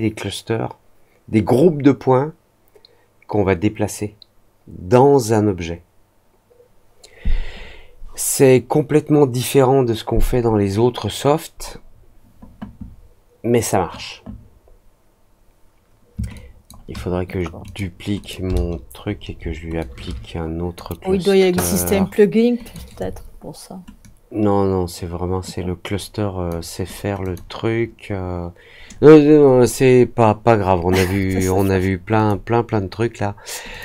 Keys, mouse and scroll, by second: 16.3-16.6 ctrl+drag, 17.6 click, 18.1 click, 19.7-20.7 drag, 21.6 click, 22.6 click, 23.9-26.4 drag, 27.2 click, 32.1 click, 33.6 click.